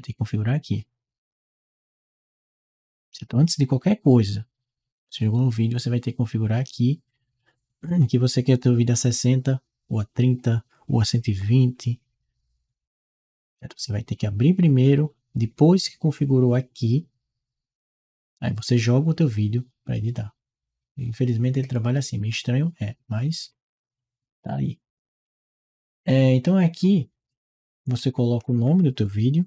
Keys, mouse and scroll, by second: 0.2 click, 21.5 click, 23.3 click, 27.8 click.